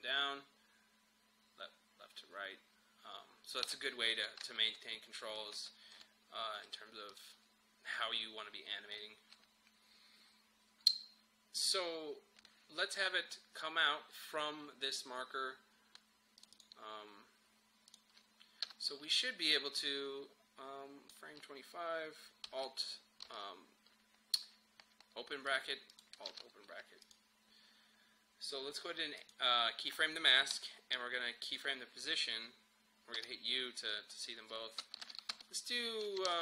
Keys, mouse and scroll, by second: 4.4 ctrl+z, 7.2 click, 16.4 click, 18.7 Return, 19.6-23.3 drag, 23.3 alt+[, 25.5 click, 26.3 alt+[, 27.0 click, 30.5 p, 31.5 click, 33.2 u, 35.1 shift+Page_Down.